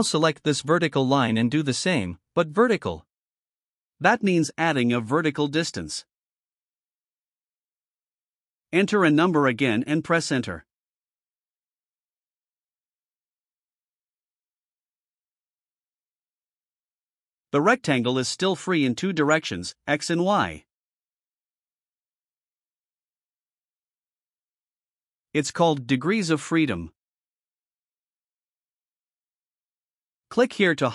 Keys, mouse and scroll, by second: 7.9 click, 10.5 8, 10.9 0, 12.9 Return, 17.7-23.7 drag, 30.8 click.